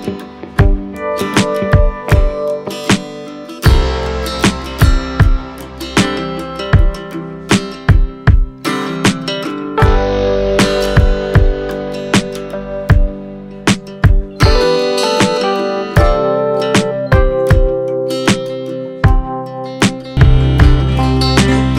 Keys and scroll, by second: 1.5 space, 4.8 z, 5.5 v, 7.5 super+a, 8.6 shift+super+c, 9.2 shift+super+v, 10.5 shift+super+a.